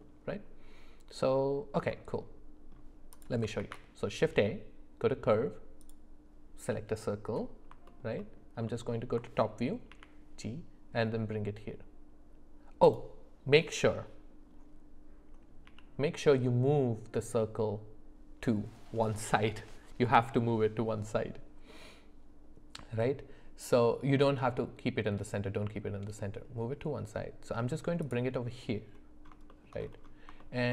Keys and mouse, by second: 1.9 middle click, 3.6 shift+a, 7.9 alt+middle click, 9.9 g, 15.7 g, 29.5 shift+middle click, 30.4 shift+middle click.